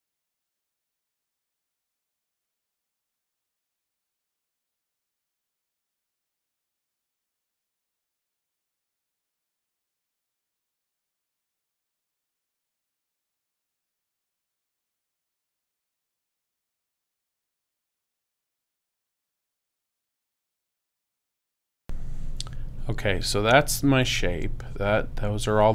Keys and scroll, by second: 3.6 super+space, 7.2 space, 10.1 shift+space, 11.5 space, 14.5 space, 19.7 super+space, 20.7 super+-, 21.1 super+space.